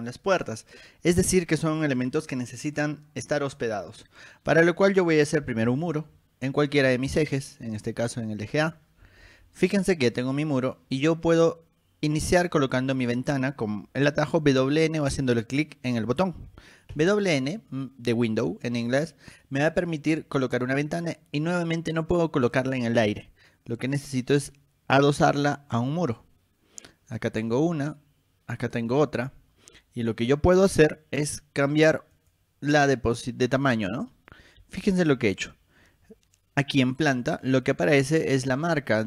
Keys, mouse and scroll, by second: 5.4-6.3 typing, 6.3 middle click, 6.3 scroll up 2, 7.3 click, 8.8 click, 9.6-10.1 scroll up 4, 16.6 w, 17.1 n, 26.1 click, 29.1 click, 30.2 click, 32.3 click, 34.0 click, 35.2-36.2 scroll up 6, 35.7 middle click, 36.0 middle click.